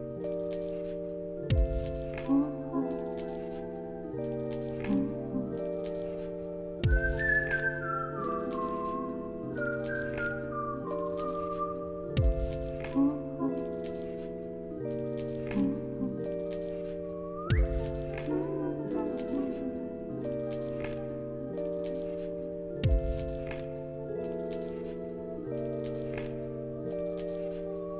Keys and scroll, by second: 23.5 alt+z, 24.3 alt+], 25.2 alt+x, 25.8 ctrl+s, 27.3 ctrl+a.